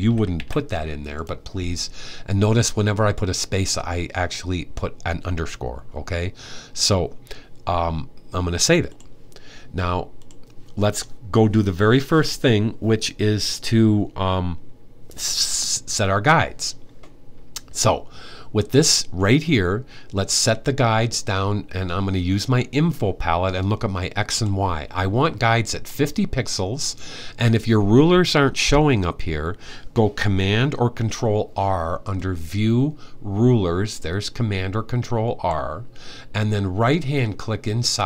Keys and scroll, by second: 0.0-0.6 typing.